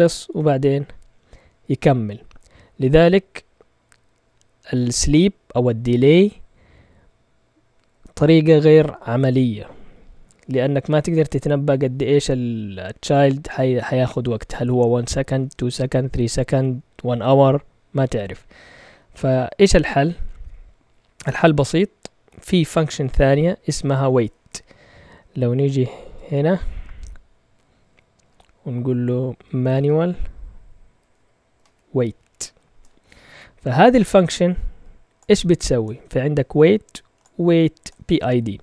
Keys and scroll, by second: 26.2 ctrl+Tab, 28.2-32.1 typing, 32.7 Return.